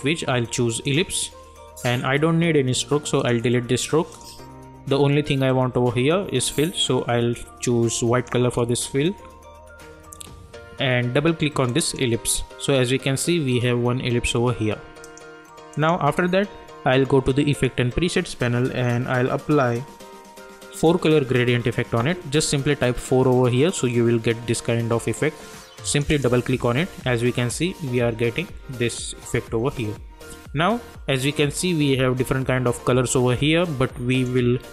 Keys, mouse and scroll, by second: 6.5 click, 8.4 Return, 12.0 click, 15.0 click, 20.8 4, 25.8 click, 34.1 click.